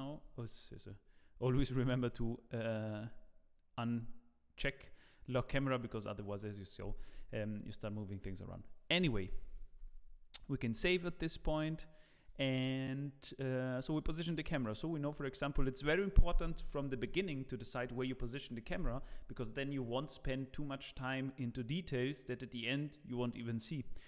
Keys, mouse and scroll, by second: 0.3 scroll up 1, 1.9 click, 7.9 middle click, 8.3-9.0 scroll down 3, 9.0 KP_0, 9.6 ctrl+s, 11.2-11.6 scroll down 2, 11.8 shift+middle click, 15.2 scroll down 1.